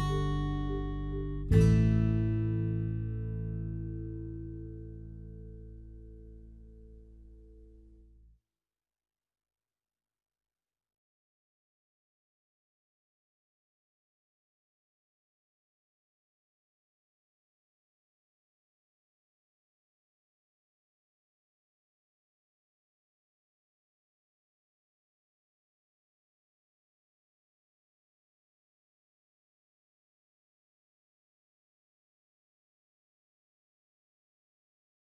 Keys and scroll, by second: 16.7 ctrl+j.